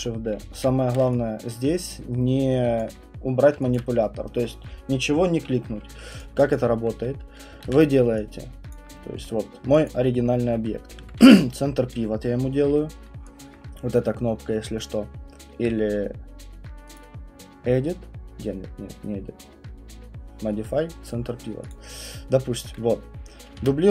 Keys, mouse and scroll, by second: 0.0-0.5 typing, 0.0-0.5 scroll, 1.0 middle click, 2.8 alt+click, 3.7 alt+click, 6.2 click, 6.5 alt+click, 7.6 ctrl+d, 8.7 click, 9.1 alt+middle click, 9.4 alt+middle click, 9.9 alt+click, 10.4 alt+middle click, 11.2 ctrl+c, 13.4 alt+click, 16.9 click, 21.7 click, 22.0 click, 23.6 ctrl+d.